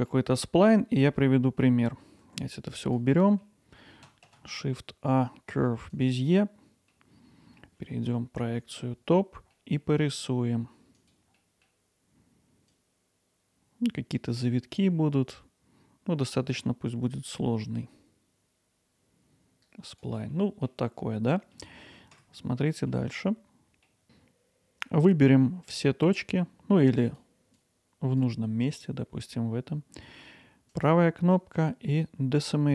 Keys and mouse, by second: 1.1 Tab, 2.2 g, 3.2 middle drag, 3.4 z, 4.3 shift+a, 6.3-6.9 middle drag, 8.4 KP_7, 9.6 middle drag, 9.9 Tab, 11.0 click, 11.4 middle click, 12.7-20.7 drag, 21.4 middle click, 22.1 Tab, 22.9 middle click, 23.3 middle click, 27.1-30.7 drag, 30.8-32.7 right drag.